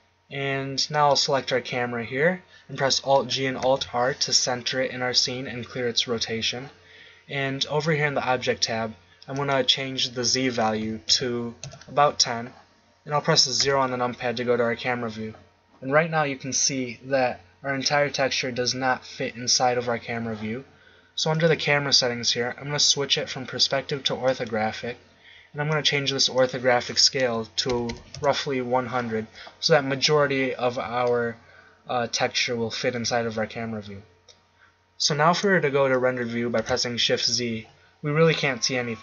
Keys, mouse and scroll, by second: 1.1-3.1 right drag, 3.1 alt+g, 3.6 alt+r, 13.6 KP_0, 21.3-24.0 middle drag, 24.3-25.8 drag, 25.9 middle click, 27.9 0, 36.6 shift+z.